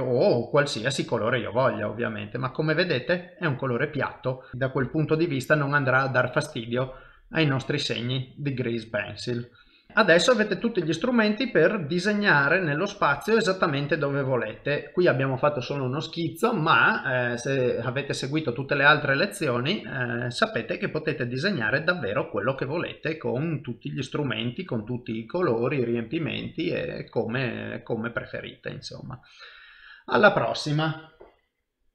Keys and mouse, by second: 0.4 click, 4.9 F12, 8.2 click, 9.9 shift+middle click, 10.5 shift+middle click, 12.7 shift+middle click, 13.2 ctrl+middle click, 13.8 shift+middle click, 14.3 middle click, 27.1 middle click.